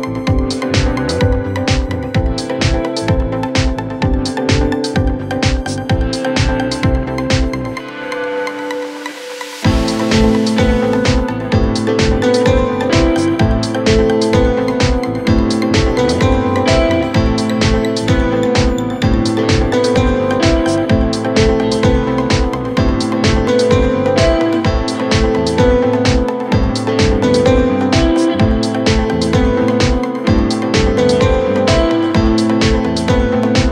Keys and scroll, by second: 6.2 Delete.